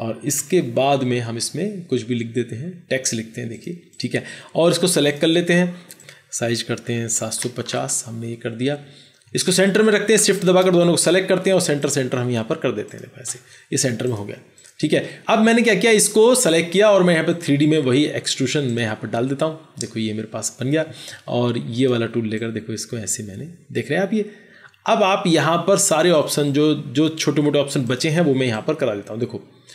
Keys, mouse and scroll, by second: 0.2 ctrl+0, 3.9 3, 3.9 KP_3, 4.9 double click, 6.9-7.3 typing, 7.3 Return, 9.2 shift+click, 10.3 shift+click.